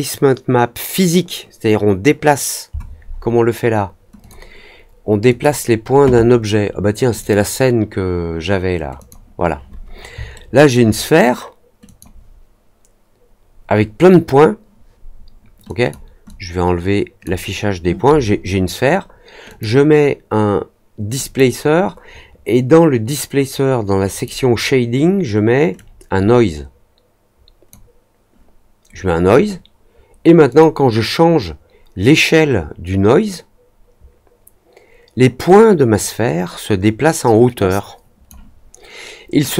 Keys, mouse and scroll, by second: 4.1-5.3 drag, 7.1 click, 8.9 click, 10.3 alt+middle click, 11.8 click, 15.6 drag, 16.2-17.2 drag, 19.4 click, 21.1 click, 24.0 click, 25.7-27.6 drag, 30.4 click, 32.0-38.2 drag, 39.4-39.5 drag.